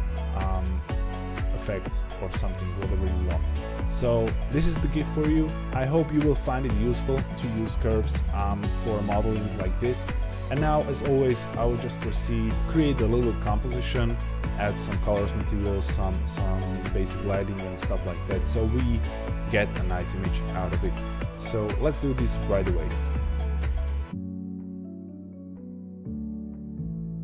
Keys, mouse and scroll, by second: 0.1-2.7 drag, 3.4-5.5 middle drag, 23.6 shift+click, 23.8 ctrl+p, 24.3 click, 24.8 click, 25.6 click, 25.8-26.1 scroll up 2, 26.1 shift+middle click, 26.3 scroll up 1, 26.5 shift+click, 27.1 right click.